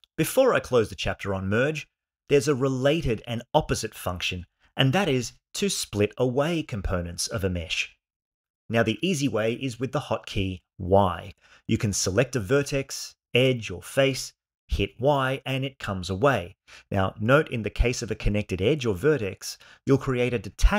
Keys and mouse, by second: 9.5 click, 10.9 y, 11.5 g, 14.7 y, 16.0 g, 17.6 click, 18.2 shift+click, 19.4 shift+click.